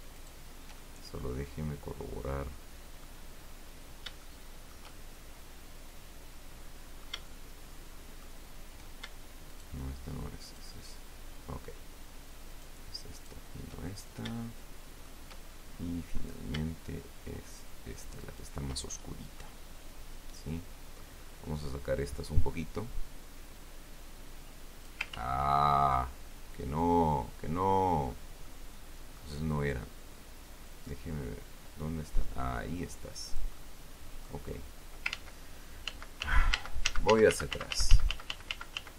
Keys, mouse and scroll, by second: 0.5 shift+right click, 1.1-3.6 shift+middle drag, 4.0-4.4 scroll up 2, 4.6-7.6 shift+middle drag, 9.9 shift+right click, 10.8 shift+right click, 12.9 shift+right click, 13.5 shift+right click, 14.2-14.8 shift+scroll down 3, 14.8 shift+middle click, 15.8-16.4 shift+scroll up 1, 18.6 shift+right click, 19.2 shift+scroll down 1, 19.7-21.5 middle drag, 22.9-25.4 drag, 25.5 ctrl+z, 28.2-28.6 scroll down 2, 28.8 click, 31.0-33.9 drag, 33.9 click, 34.9 scroll up 2, 35.5 ctrl+z, 36.2 ctrl+z.